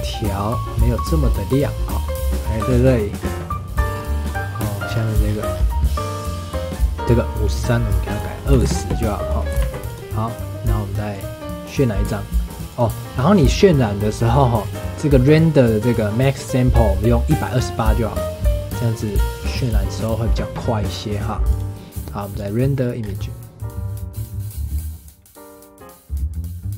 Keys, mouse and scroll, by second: 0.8 click, 2.6 click, 3.1-3.9 scroll down 4, 3.9-6.8 scroll up 5, 8.7-9.6 drag, 9.6 ctrl+s, 11.2-12.7 drag, 19.6-24.3 drag, 26.7 click.